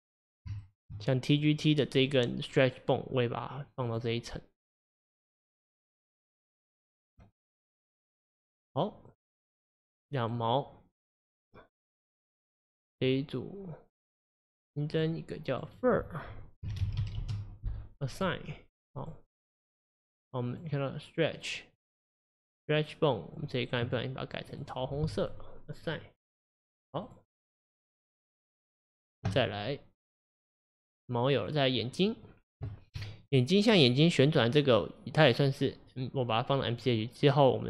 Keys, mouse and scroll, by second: 0.6-1.3 shift+middle drag, 1.3 click, 2.0 click, 3.9-6.1 drag, 6.4 click, 7.1 click, 9.1 click, 9.9-12.0 middle drag, 12.0 drag, 14.9-15.6 drag, 15.7-19.1 drag, 20.5 click, 21.8 click, 23.4 click, 24.5-27.1 drag, 28.6-30.1 drag, 30.9 click, 31.4 click, 32.0 middle click, 32.3-32.7 scroll down 1, 32.7-33.3 shift+middle drag, 33.3 click.